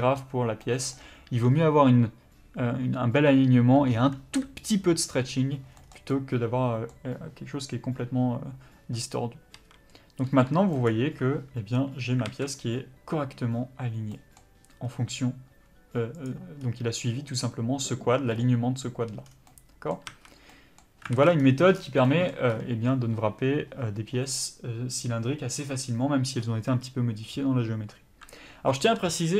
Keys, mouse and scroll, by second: 5.7-6.1 scroll down 2, 5.8 middle click, 6.1 middle click, 9.5 a, 10.3 g, 10.8 click, 12.2 alt+a, 14.2 middle click, 16.2 click, 19.2 scroll down 1, 19.5 middle click, 20.1 a, 20.5 middle click, 21.1 alt+a, 21.3-21.7 scroll down 1.